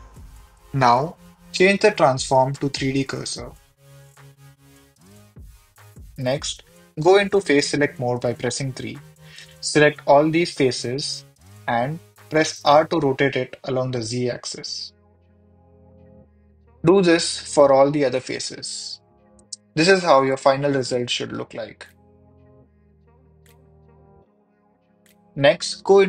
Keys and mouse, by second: 1.8-5.5 drag, 6.4 3, 7.7 click, 11.2 middle click, 12.5 r, 13.2 z, 17.2 click, 17.7 Tab, 20.1 ctrl+s, 22.0-22.9 drag.